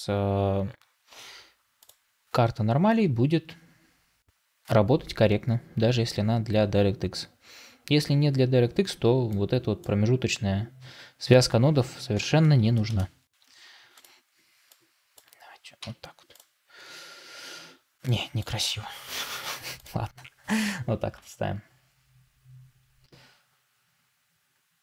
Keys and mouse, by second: 9.6-12.0 drag, 12.0 s, 14.9-18.2 drag.